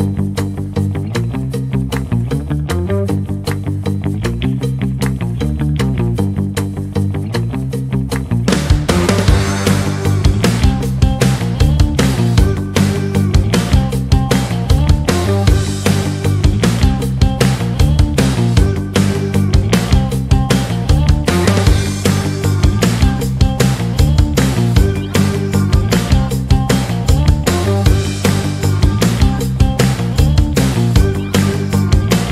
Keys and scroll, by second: 25.6 KP_Add, 28.3 F3.